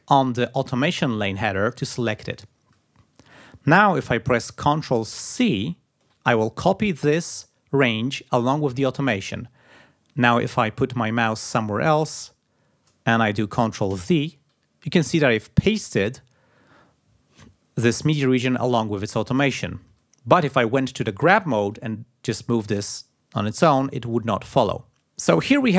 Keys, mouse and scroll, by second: 5.7 ctrl+c, 14.2 ctrl+v, 21.6 g, 22.0-23.9 drag.